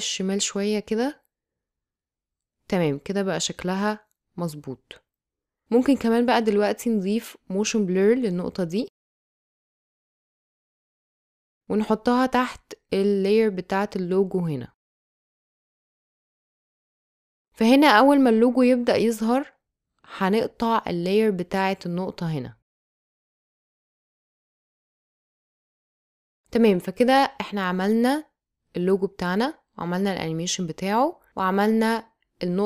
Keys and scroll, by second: 1.0 space, 2.4 space, 4.0 space, 8.4 space, 14.8 space, 17.2 space, 31.3 space.